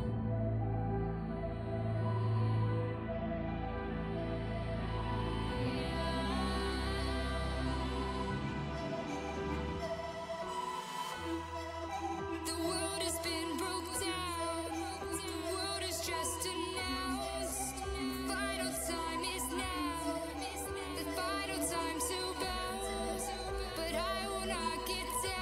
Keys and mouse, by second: 0.1 click, 0.1 x, 2.1-6.9 middle drag, 9.1 v, 12.1-14.4 drag, 15.8 x, 18.0-20.3 middle drag, 20.3 x, 22.0-23.7 right drag, 24.3 ctrl+z, 24.5 ctrl+z.